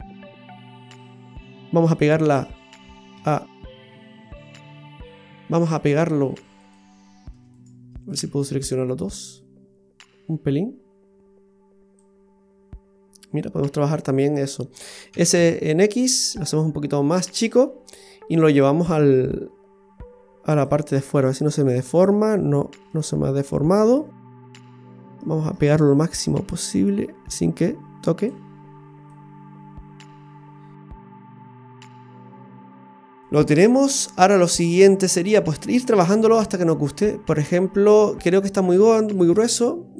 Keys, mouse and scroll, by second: 0.0-1.1 scroll down 1, 1.1 middle click, 1.1 scroll down 1, 3.1 a, 4.0 a, 4.5 right click, 5.1 right click, 5.7 right click, 6.6 shift+right click, 6.8 shift+right click, 7.6 right click, 8.1 shift+right click, 9.3 click, 12.0 click, 15.1 s, 18.4 click, 18.7 click, 19.1 click, 20.9 middle click, 22.3-22.9 scroll down 3, 22.9 middle click, 25.2 middle click, 26.1 click, 28.0 click, 29.1 click, 29.4 click, 29.5 click, 32.0-32.4 scroll up 2, 32.3 middle click, 35.5 middle click, 38.3-38.7 scroll up 4, 38.8 shift+middle click, 39.7 middle click.